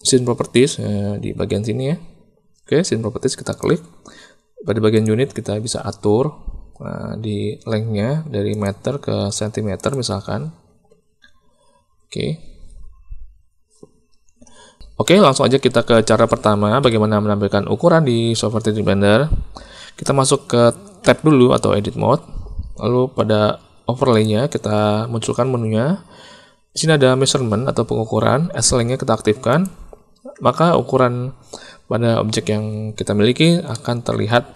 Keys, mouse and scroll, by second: 4.9 click, 8.6-9.9 drag, 16.7 n, 20.9 Tab, 24.0-29.8 drag, 33.8 middle click.